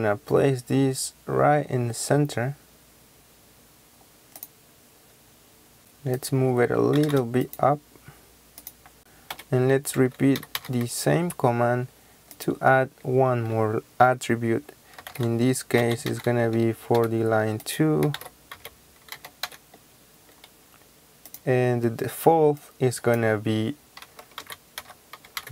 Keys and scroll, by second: 5.7 Escape, 7.0 m, 7.1 space, 8.9 Return, 8.9 Escape, 8.9-10.6 typing, 9.3 Escape, 14.8-19.9 typing, 24.2-25.5 typing.